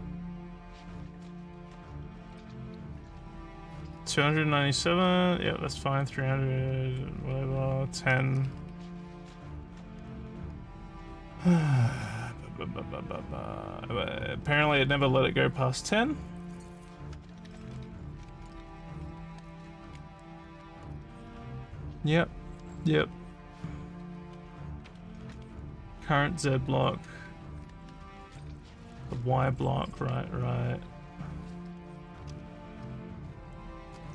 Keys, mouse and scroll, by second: 11.4 g, 15.8 r, 21.2 d, 27.3 s, 32.7-34.1 typing.